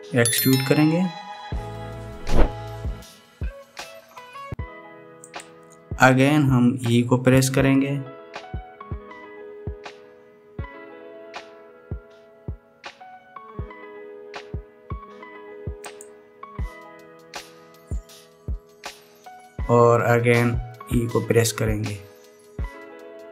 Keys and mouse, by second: 7.9 e, 21.5 e.